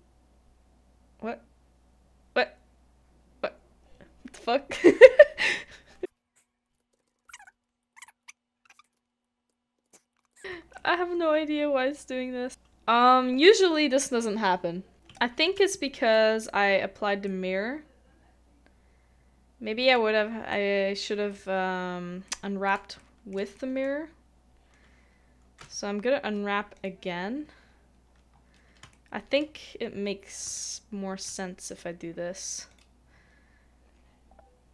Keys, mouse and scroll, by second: 6.6 middle click, 6.9 ctrl+z, 7.4 middle click, 9.7 ctrl+z, 9.9 middle click, 10.4 ctrl+z, 10.8 middle click, 14.9 scroll up 1, 15.1 shift+middle click, 21.3 Tab, 22.2 middle click, 23.0 shift+middle click, 23.5 shift+middle click, 23.8-25.6 scroll down 1, 27.7-28.2 scroll up 1, 28.2 scroll down 1, 28.4-28.8 scroll up 1, 28.9 shift+middle click, 30.5 shift+middle click.